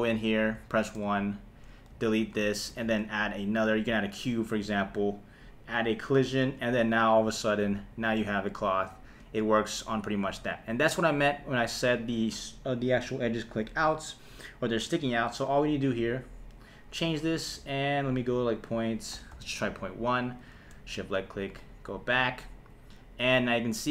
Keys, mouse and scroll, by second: 0.6 KP_1, 1.9 x, 2.8 shift+a, 6.0 click, 6.6 space, 9.2 space, 10.6 click, 13.9 click, 18.5-19.6 drag, 20.6 shift+Left, 21.0 space.